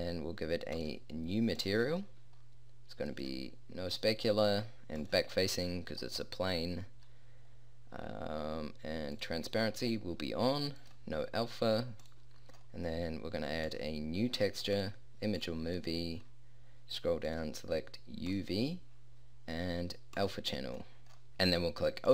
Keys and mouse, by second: 0.7 click.